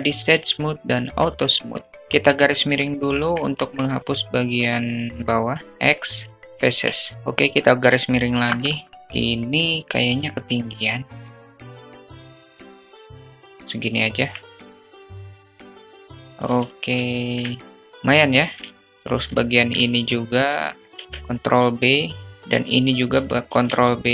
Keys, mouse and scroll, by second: 0.0 q, 0.9-1.3 alt+drag, 1.4 alt+click, 1.9 /, 2.4-3.0 alt+drag, 3.0 Tab, 4.1 3, 4.3-5.6 drag, 5.6 x, 6.2 Tab, 7.4 /, 8.7 drag, 10.9 Tab, 11.3 alt+z, 11.4 click, 12.1 `, 12.6 click, 13.8 Tab, 14.0 drag, 14.3 alt+z, 14.6 alt+z, 14.9 click, 16.0 alt+z, 16.6 shift+click, 17.5 shift+a, 17.7 shift+click, 18.2 shift+click, 18.8 alt+Tab, 19.0 alt+click, 19.6 2, 20.2 click, 20.8 ctrl+b, 23.0 ctrl+b.